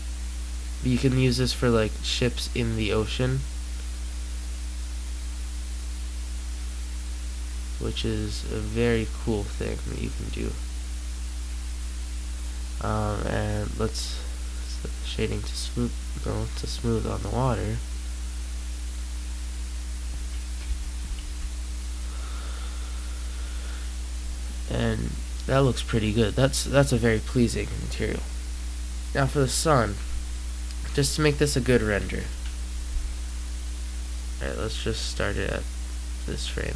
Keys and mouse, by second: 14.4-16.4 drag, 20.6 g, 28.8 click, 32.1 Escape, 33.3-34.4 drag.